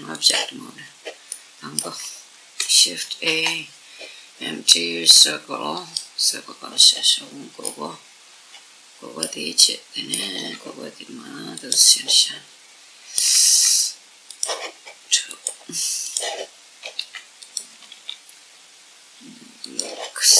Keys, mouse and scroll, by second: 0.6-2.8 middle drag, 2.7 shift+a, 6.2-6.8 scroll up 1, 6.8-7.3 scroll down 1, 7.3-9.1 middle drag, 9.3-10.8 middle drag, 10.1 r, 10.9 middle click, 11.3 click, 11.6-13.5 middle drag, 13.1 r, 14.0 click, 15.8 click, 16.7 r, 17.2 click, 17.6 g, 19.4 click.